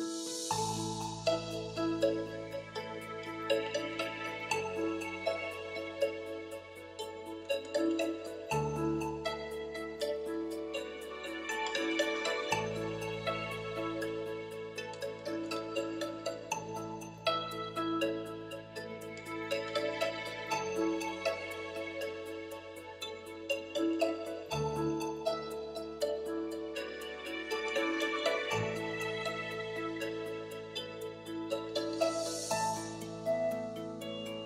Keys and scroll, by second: 5.2 c, 8.7-11.4 typing, 12.0 Return, 15.5 shift+w, 16.0 shift+i, 18.2 space, 20.5-22.4 typing.